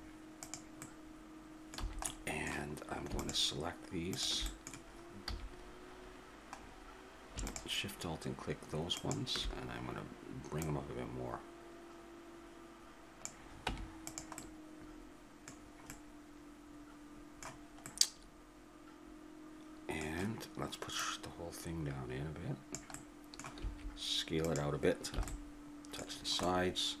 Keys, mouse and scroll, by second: 1.8 a, 3.2-6.2 drag, 5.3 a, 6.6 middle click, 7.5-11.9 drag, 13.7 Tab, 21.0-23.0 drag, 23.6 s, 25.2 a, 26.2-27.0 middle drag.